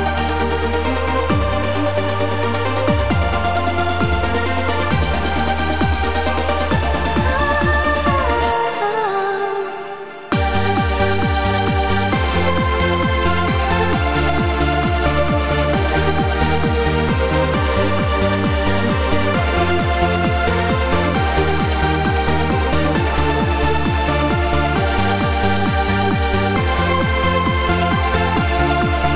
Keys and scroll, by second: 5.6 w, 8.2 q, 9.9 w, 14.7 x, 15.0 q, 16.9 q, 18.1 w, 26.0 7.